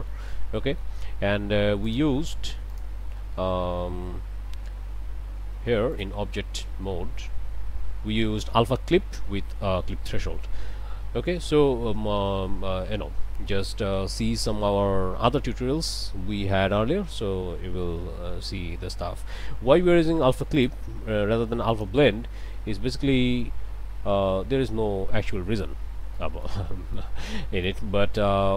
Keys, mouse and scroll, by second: 0.1 middle click, 1.9 click, 2.7 click, 5.9 click, 8.0 scroll down 1, 20.6 click, 21.7 click, 23.4 click, 24.4 scroll up 1, 25.1 shift+middle click, 25.6 shift+scroll up 1, 26.2 shift+middle click, 26.9 shift+middle click, 27.0 scroll up 1, 28.2 scroll up 1.